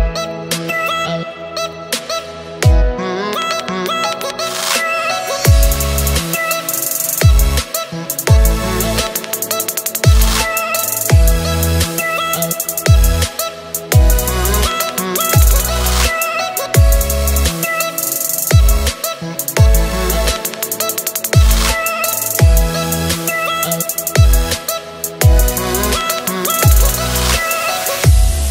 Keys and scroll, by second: 5.1 space, 5.6 space, 5.7 space, 19.8 space, 20.3 super+space, 20.4 super+space, 20.5 super+space, 20.5 super+space, 20.8 super+space, 21.0-22.1 super+space.